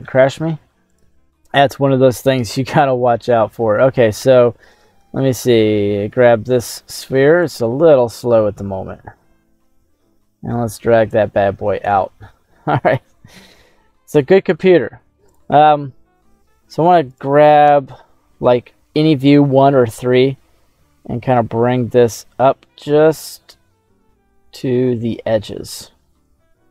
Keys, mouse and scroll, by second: 7.9-9.3 drag, 12.1-13.6 middle drag, 14.1 middle click, 15.2 click, 16.3 s, 17.1 right click, 17.7 KP_1, 19.8 s.